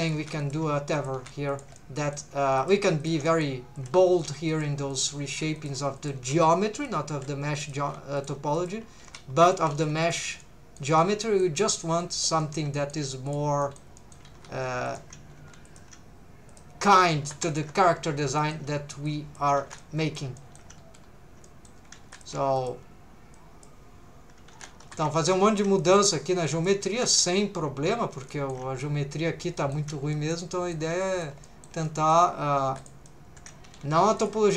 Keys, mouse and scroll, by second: 0.0-1.1 typing, 0.0 click, 0.4 shift+click, 0.9 click, 1.5 shift+click, 1.8 middle click, 2.6 click, 2.8 g, 3.0 shift+click, 3.3 middle click, 3.8 click, 4.0-7.9 typing, 4.2 right click, 4.5 right click, 4.5 click, 4.9 shift+right click, 4.9 shift+click, 5.6 shift+right click, 6.0 click, 6.8 shift+click, 7.6 click, 8.2 shift+click, 8.6 click, 9.0 g, 9.4 shift+click, 9.7 g, 10.0 shift+click, 10.4 middle click, 11.0 middle click, 11.6 middle click, 12.0 middle click, 12.4 middle click, 12.8 shift+middle click, 13.3 click, 13.6 shift+middle click, 14.0 shift+middle click, 14.3 g, 14.9 shift+click, 15.3 g, 15.7 shift+click, 16.5 click, 17.0 2, 17.2 3, 17.5 alt+shift+click, 17.8-18.3 scroll down 1, 18.4 shift+middle click, 19.1 click, 19.6 alt+a, 19.8 middle click, 20.4 shift+middle click, 20.8-21.1 scroll up 3, 21.5 middle click, 22.1 3, 22.1 click, 22.6 shift+click, 23.3 click, 24.5 alt+a, 25.2 alt+shift+click, 25.4 scroll down 1, 25.8 shift+middle click, 26.5 click, 26.9 alt+a, 27.2 3, 28.3 shift+middle click, 29.6 shift+middle click, 30.1 middle click, 30.5 shift+middle click, 31.0 middle click, 31.4 shift+middle click, 31.9 shift+middle click, 32.7 3, 32.8 click, 33.1 middle click, 33.7 g, 34.2 shift+click.